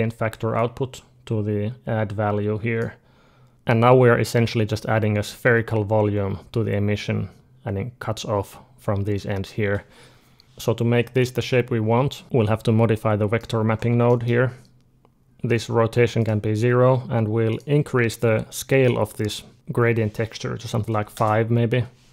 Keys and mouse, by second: 4.0-6.0 middle drag, 10.6-12.2 middle drag, 12.8-15.2 middle drag, 15.2 ctrl+z, 16.0-18.0 drag, 18.3-21.0 drag.